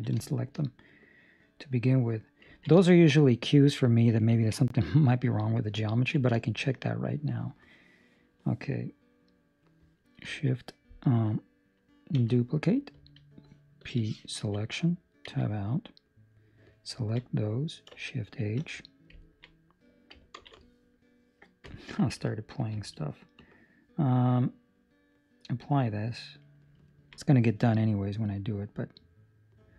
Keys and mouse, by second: 0.2 shift+middle click, 0.5 middle click, 2.5 ctrl+middle click, 2.7 shift+middle click, 5.9 ctrl+middle click, 6.3 shift+middle click, 6.7 middle click, 8.7 middle click, 13.7 shift+d, 13.7 p, 15.2 Tab, 16.3 right click, 17.0 ctrl+middle click, 17.4 middle click, 18.3 shift+h, 19.1 ctrl+middle click, 19.5 middle click, 20.3 ctrl+space, 22.2 Escape, 22.2 1, 22.2 `, 23.3 Escape, 23.3 click, 25.5 click, 26.8 ctrl+middle click, 27.1 middle click.